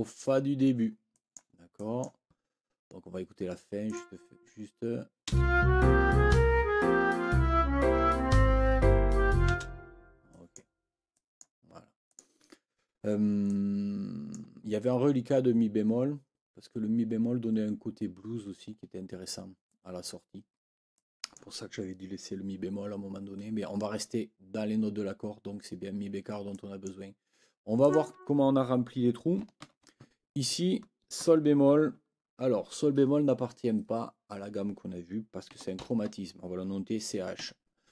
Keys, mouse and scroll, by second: 1.1 click, 1.7 click, 3.8 click, 5.3 space, 9.5 space, 10.3 click, 11.1 click, 12.1 click, 13.5-14.5 drag, 20.9 click, 26.5 click, 27.8 click, 29.6 ctrl+l, 35.5 c, 35.8 h, 37.4 Escape.